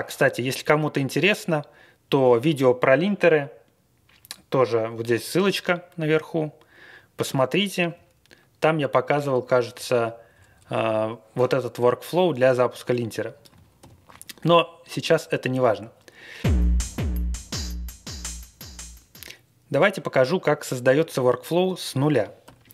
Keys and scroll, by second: 7.9-8.3 scroll up 5, 8.3-8.9 Page_Up, 9.0 Up, 9.7 Up, 9.7 Down, 10.3 Down, 13.8 alt+shift+., 22.2-22.7 typing.